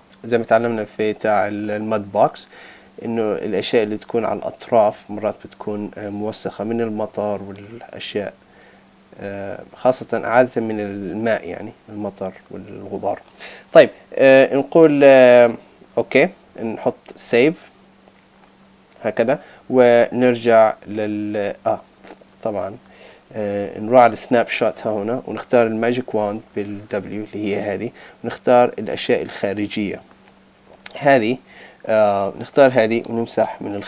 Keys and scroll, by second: 17.1 super+s, 20.1 super+Tab.